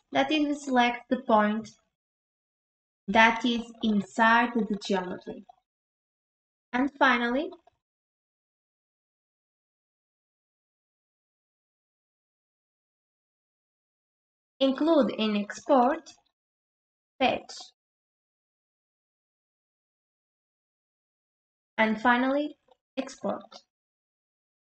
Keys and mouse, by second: 2.1 click, 15.9 click, 16.4 click, 17.2-19.7 drag, 23.9 click.